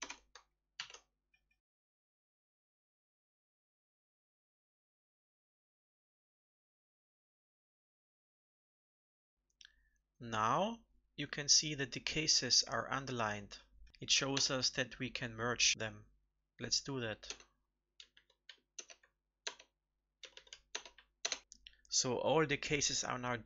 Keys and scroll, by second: 0.7 ctrl+s, 2.1 ctrl+alt+Up, 2.2 ctrl+alt+Up, 2.3 ctrl+alt+Up, 2.7 ctrl+alt+Up, 2.7 ctrl+c, 2.9 alt+Right, 3.4 ctrl+shift+Left, 3.6 ctrl+v, 3.9 alt+Left, 5.4 ctrl+alt+Up, 5.5 ctrl+alt+Up, 5.7 ctrl+alt+Up, 6.2 ctrl+c, 6.3 alt+Right, 7.1 ctrl+alt+Up, 7.3 ctrl+v, 7.6 alt+Left, 7.8 ctrl+s, 14.3 alt+Return, 18.7 alt+Return, 20.6 alt+Return, 21.4 ctrl+s.